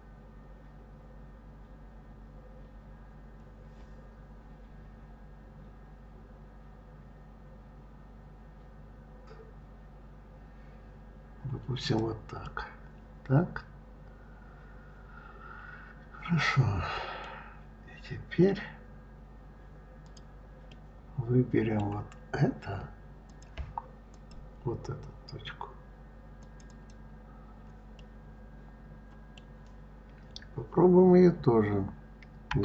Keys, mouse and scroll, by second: 12.2-15.3 middle drag, 17.6-18.1 scroll down 2, 18.1-18.7 scroll up 4, 19.8 click, 20.5-23.1 middle drag, 23.1 click, 23.9 click, 26.2 click, 26.5 click, 27.8-30.8 middle drag.